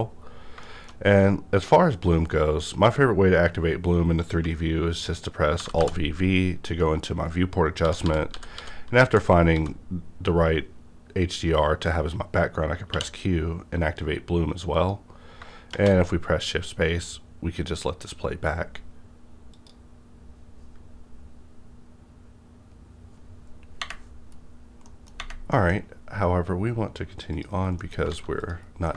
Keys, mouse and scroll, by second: 0.3 scroll down 1, 0.6 shift+middle click, 4.4 shift+middle click, 5.6 alt+v, 7.8-9.5 typing, 12.9 q, 12.9 a, 14.1 typing, 14.7 click, 15.7 shift+space, 25.5 middle click, 25.5 middle click, 25.5 shift+_, 27.3 click, 27.3 click, 27.8 middle click, 28.0 click, 28.1 a, 28.4 click, 28.7 scroll down 1, 28.9 middle click.